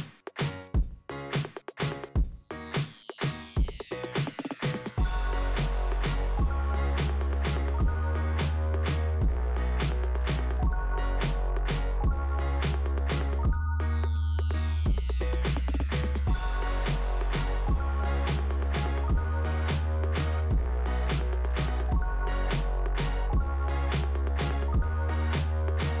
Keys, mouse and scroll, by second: 0.2 click, 1.0 click, 1.1 click, 2.3 click, 4.9 click, 7.1 click, 9.1 click, 12.7 scroll down 2, 13.8 f, 14.6 middle click, 15.8 click, 17.4 ,, 17.6 click, 19.2 click, 24.3 click.